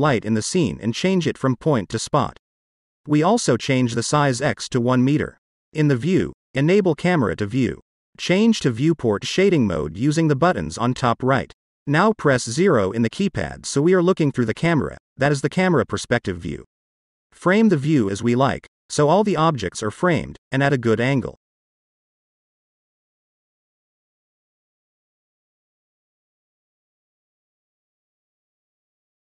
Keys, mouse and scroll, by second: 0.7 click, 2.0-3.8 drag, 4.6 middle click, 5.8 click, 7.5 click, 9.0 middle click, 11.4 click, 13.1 KP_0, 14.1-15.1 scroll up 4, 15.1-15.9 middle drag, 16.5 middle click, 17.3-17.8 shift+middle drag, 18.1-18.9 scroll up 2, 19.0-19.8 shift+middle drag, 20.2-21.4 middle drag, 21.8-22.8 shift+middle drag, 23.2-24.3 middle drag, 24.8-26.9 shift+middle drag, 28.8-29.2 middle drag.